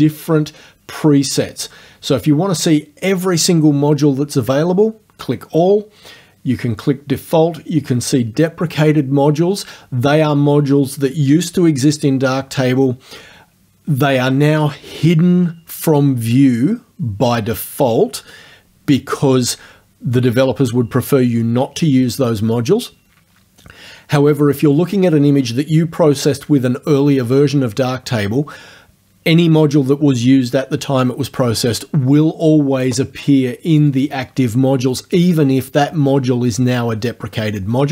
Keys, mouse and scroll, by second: 32.8 click, 33.8 click.